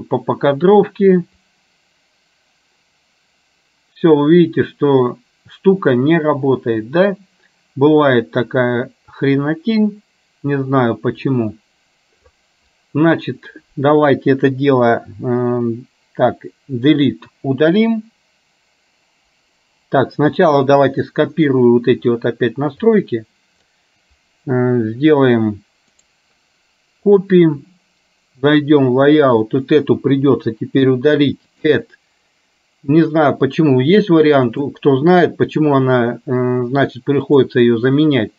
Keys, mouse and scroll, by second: 0.0 click, 1.6-12.5 drag, 30.3 Delete, 31.6-35.0 drag.